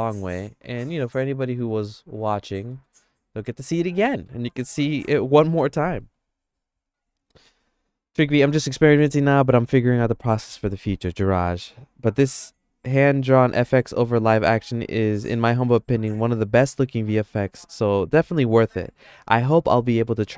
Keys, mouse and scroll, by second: 1.7 Tab, 2.7 middle click, 3.0-4.3 middle drag.